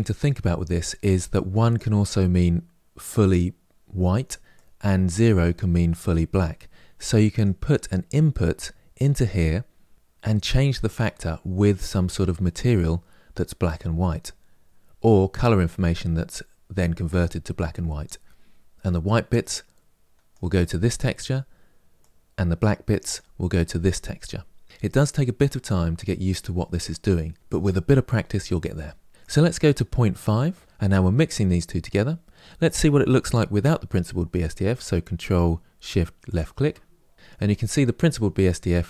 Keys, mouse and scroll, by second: 10.1-36.2 drag.